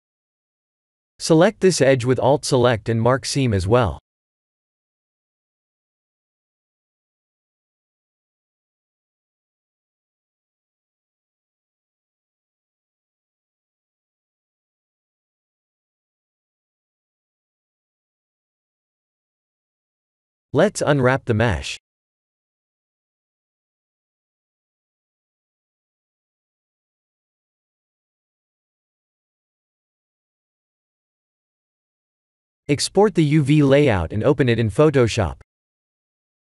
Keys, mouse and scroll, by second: 0.3 middle click, 2.8 alt+click, 3.4 middle click, 4.0 scroll up 1, 4.1 scroll down 2, 4.2 scroll up 1, 4.5-6.7 scroll down 8, 5.2 middle click, 6.9-7.3 scroll up 6, 7.6 shift+middle click, 8.4 middle click, 14.0-14.6 scroll up 6, 14.7 shift+middle click, 15.6 middle click, 17.4 middle click, 17.6 shift+middle click, 18.9 ctrl+e, 20.2-20.5 scroll down 5, 20.6 middle click, 21.1 a, 22.1 u, 23.8-24.2 scroll up 2, 24.5 shift+middle click, 29.1 scroll down 3, 29.7 scroll up 4, 31.5 click.